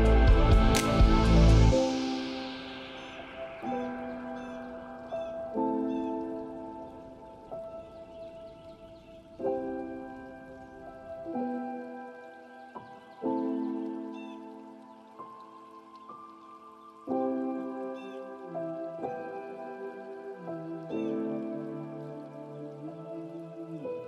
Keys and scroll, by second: 4.4 ctrl+space, 13.0 ctrl+z, 21.4 ctrl+space.